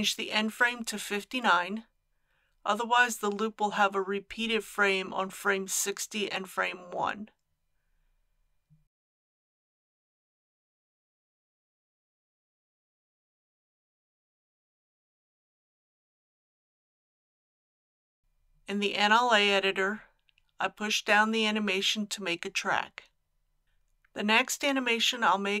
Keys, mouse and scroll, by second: 2.3 KP_5, 2.5 KP_9, 10.9 click, 12.1 middle click, 14.1 click, 25.2-25.6 scroll down 1.